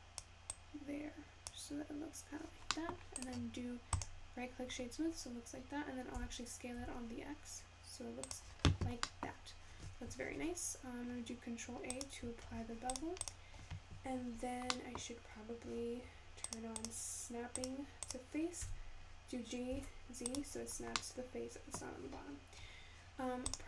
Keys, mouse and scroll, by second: 6.6 s, 13.0 click, 21.8-23.6 middle drag.